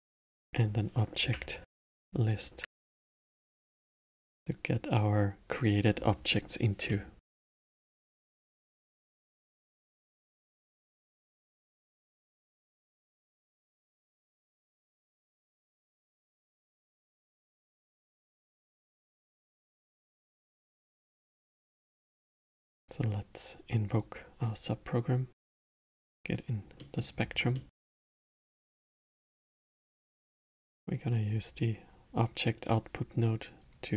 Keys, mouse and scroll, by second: 0.2-2.7 drag, 2.7 Up, 5.5-8.5 drag, 12.7 BackSpace, 15.0-18.0 drag, 21.1-22.8 middle drag, 22.8-24.6 drag, 25.4 click, 26.7 middle click, 27.2 scroll down 1, 27.5-28.9 middle drag, 28.9 shift+a, 33.6-33.9 drag.